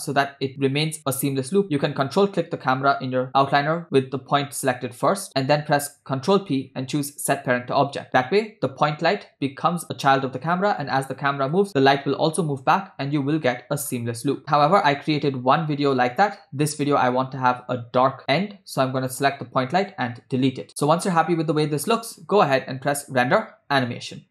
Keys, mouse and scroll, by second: 1.9 ctrl+click, 6.2 ctrl+p, 10.8 space, 11.7 space, 12.6 space, 13.5 space, 13.9-14.3 scroll up 5, 14.5 scroll down 6, 14.7 scroll down 4, 15.1 space, 16.8 space, 18.2 click, 19.0 click, 20.6 Delete, 20.8 scroll down 3, 22.9-24.3 drag.